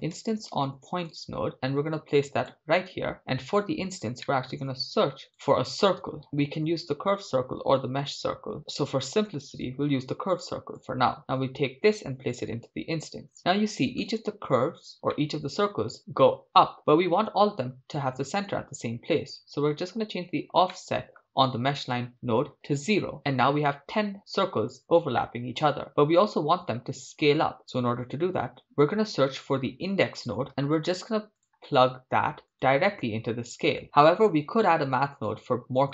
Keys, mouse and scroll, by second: 3.6 click, 4.2-4.8 middle drag, 4.8 shift+a, 11.2-12.7 drag, 14.6 middle click, 15.1-16.3 shift+middle drag, 16.3-16.8 scroll down 3, 16.8 scroll up 2, 20.7 scroll up 2, 20.7-21.8 middle drag, 21.8-23.3 drag, 25.2-27.5 shift+middle drag, 29.0 shift+a, 33.8 click.